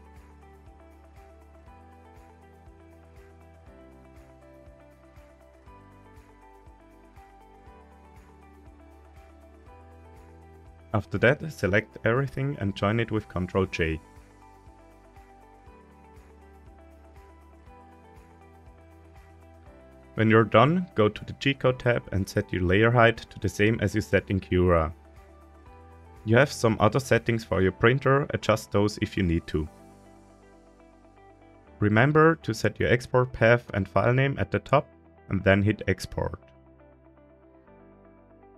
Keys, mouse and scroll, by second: 0.0 middle click, 0.4 click, 0.7 middle drag, 1.4 right click, 2.6 ctrl+a, 5.1 right click, 5.9 ctrl+a, 7.5 right click, 8.0 ctrl+a, 10.2-10.5 middle drag, 11.5 a, 12.3-12.9 scroll down 3, 12.8 middle click, 13.3-14.4 scroll up 1, 15.5 ctrl+j, 16.7-17.7 scroll up 2, 18.4 scroll down 1, 20.7 click, 23.4 scroll down 1, 24.1-24.6 middle drag, 28.4-31.5 drag, 37.2 click, 37.6 click.